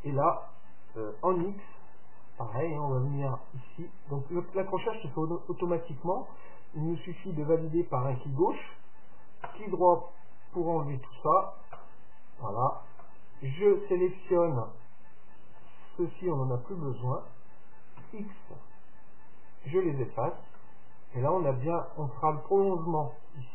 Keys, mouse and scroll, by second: 13.1-15.0 right drag, 15.6-17.5 right drag, 18.0 x, 20.1-22.5 middle drag.